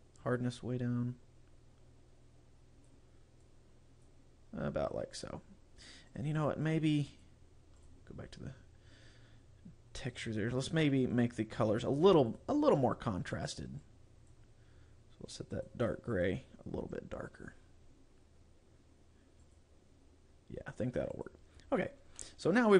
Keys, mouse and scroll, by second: 0.3 click, 3.5 click, 6.1 click, 6.5 click, 7.1 click, 7.9 click, 10.1 click, 10.7 click, 11.2 click, 12.3 click, 15.6 click, 16.2 click, 19.5 click, 21.3 click, 21.9 scroll down 2, 22.3 middle click.